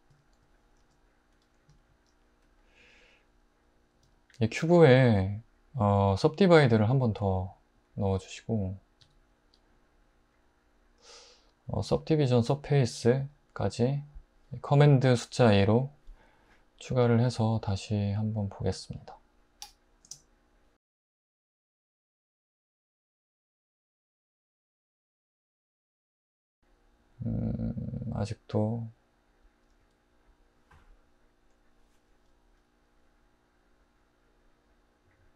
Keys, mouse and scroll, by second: 0.8 alt+h, 4.1 click, 4.6 Tab, 9.0 Tab, 12.4 super+2, 19.6-20.0 typing, 21.8 alt+z, 25.5 space, 29.8-32.2 middle drag.